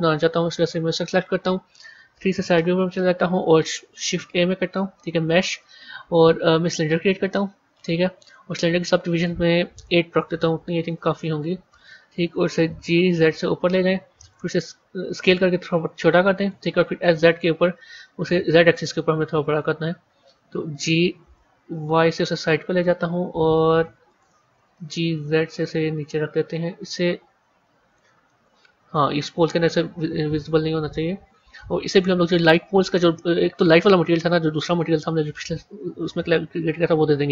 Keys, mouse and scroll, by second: 0.5 click, 1.6 KP_3, 2.4 scroll up 5, 4.0 shift+a, 11.6-12.6 drag, 12.6 g, 15.0 s, 16.7 s, 20.5 g, 24.7 g, 28.2-30.2 middle drag, 30.2 KP_1, 36.5-37.3 drag.